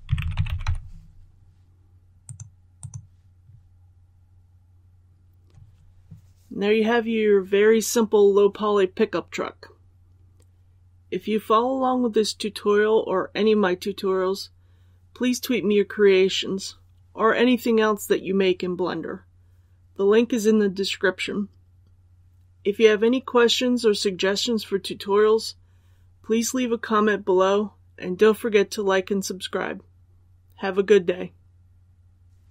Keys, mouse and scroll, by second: 0.0-0.5 typing, 2.2 click.